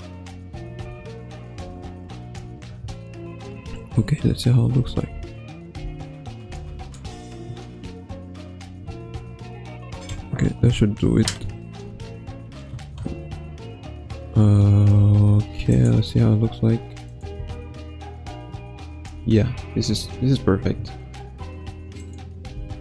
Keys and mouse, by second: 0.8 Right, 1.6 i, 4.6-5.0 drag, 5.1 space, 5.7 space, 6.6 ctrl+s, 15.8-17.2 drag, 17.4 space, 19.0 space, 20.2 ctrl+s, 22.1 click, 22.5 space.